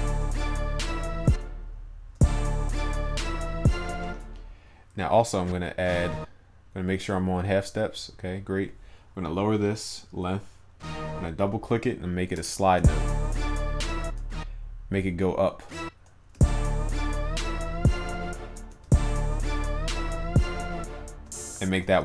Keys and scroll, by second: 21.9 ctrl+s.